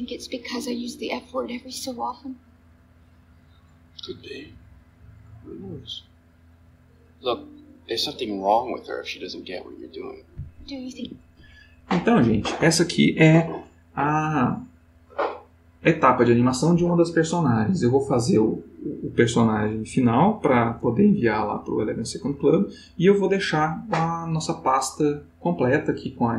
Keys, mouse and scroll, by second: 11.0 Escape.